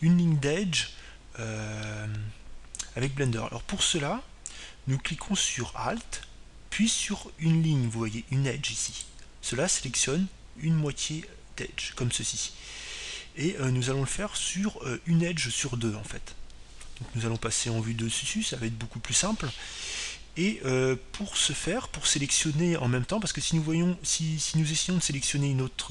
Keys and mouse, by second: 1.0-3.1 middle drag, 3.6-5.5 middle drag, 10.5-12.3 right drag, 11.6-13.6 middle drag, 18.9 KP_7.